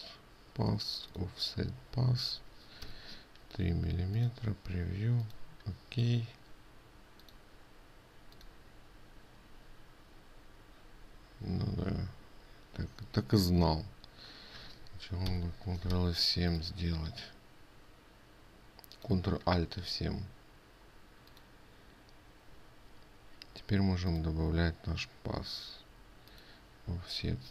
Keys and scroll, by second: 15.9 ctrl+alt+7.